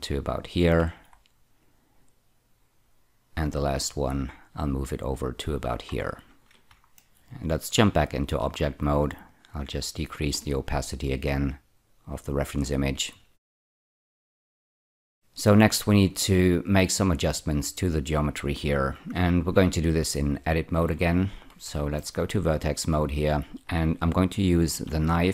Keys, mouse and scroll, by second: 0.4 click, 0.9 ctrl+r, 1.6 click, 3.9 click, 5.9 scroll down 2, 7.0 shift+middle click, 7.7 Tab, 9.2 click, 10.6 click, 13.4 shift+middle click, 14.8 scroll up 1, 15.1 shift+middle click, 20.0 click, 20.7 Tab, 20.8 1, 21.9 shift+middle click, 22.5-24.4 scroll up 3, 24.7 k.